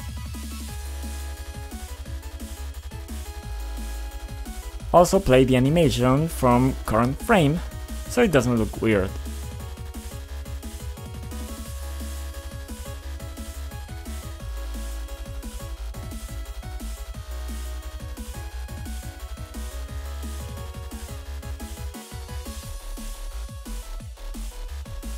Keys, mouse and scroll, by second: 0.0-0.1 typing, 0.0 click, 0.1 click, 1.6 scroll down 2, 2.5 click, 4.4 click, 4.5 double click, 5.2 double click, 5.8 click, 6.7 click, 7.2 click, 8.0 F5, 9.0 click, 9.5-14.3 typing, 16.3-19.6 typing, 20.8-22.4 typing, 23.5 click, 24.7 click.